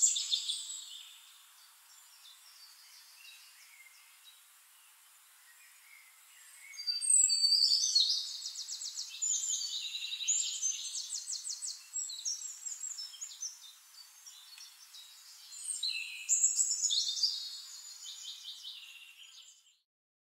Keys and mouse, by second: 0.3 click, 1.2 click, 2.0 click, 2.7 click, 3.9 click, 4.6 ctrl+d, 4.9 ctrl+click, 5.8 ctrl+click, 6.4 ctrl+click, 7.1 drag, 7.4 click, 7.7 click, 8.1 click, 8.4 click, 8.7 click, 9.9 shift+-, 10.6 click, 11.1 click, 11.6 drag, 11.9 click, 12.3 drag, 12.9 ctrl+shift+click, 13.6-14.4 ctrl+shift+drag, 15.3 click, 15.7 middle click, 16.5 shift+-, 17.3 click, 18.3-19.4 drag, 19.5 click.